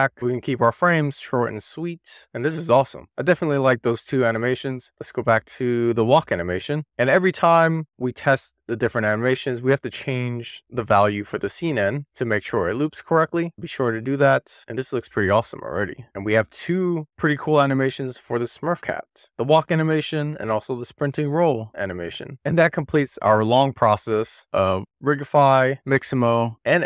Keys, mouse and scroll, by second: 0.2 g, 0.8 click, 1.4 scroll up 2, 1.6 middle click, 1.9 click, 2.2 click, 2.3 space, 3.0 click, 3.1-3.8 middle drag, 4.7 click, 5.9 click, 6.5 click, 6.9 middle click, 8.6 click, 10.7 click, 12.0 middle click, 12.8 click, 13.0 scroll up 2, 13.3-13.6 scroll down 2, 13.6 middle click, 14.4 middle click, 16.1-16.7 middle drag, 17.5-18.1 middle drag, 20.4 click, 24.0-26.8 middle drag.